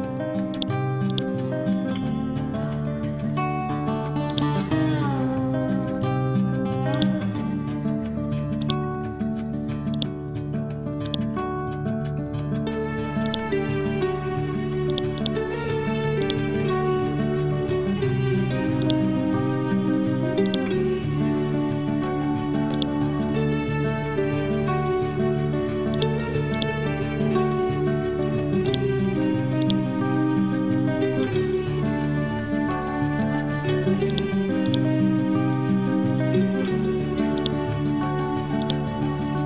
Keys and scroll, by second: 21.8 c, 23.7 Down, 27.6 Down, 30.9 Up.